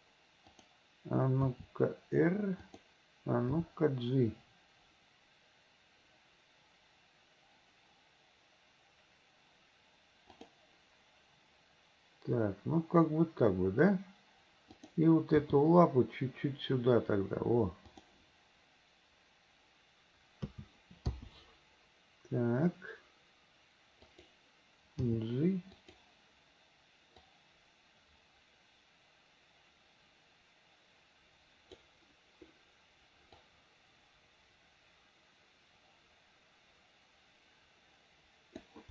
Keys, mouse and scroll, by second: 0.5 click, 1.5 r, 3.5 g, 14.8 click, 15.4 g, 20.5 a, 21.1 i, 24.0 click, 25.0 g, 27.3-31.8 drag, 33.5-38.7 drag.